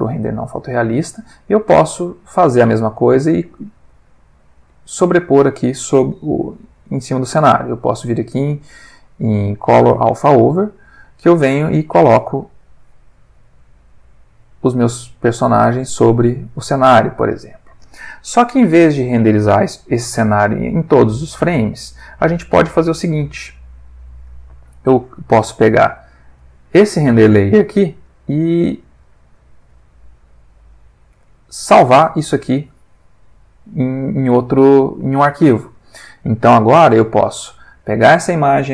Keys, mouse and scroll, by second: 0.0 click, 1.1 click, 2.3 ctrl+middle click, 3.0 ctrl+middle click, 6.8 shift+a, 9.9 click, 10.5 click, 11.5-12.4 drag, 12.6-13.5 drag, 15.2 click, 16.6 middle click, 20.3 middle click, 24.0 click, 24.8-25.7 drag, 26.4 click, 27.6 middle click, 28.0-29.2 middle drag, 32.5-35.9 drag, 37.7-38.5 drag.